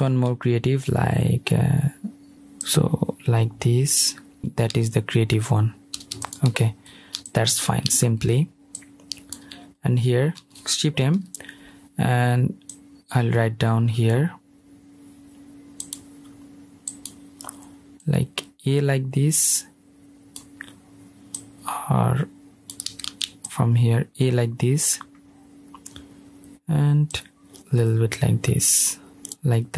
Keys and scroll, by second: 0.9 super+z, 22.8 super+z, 24.1 super+z.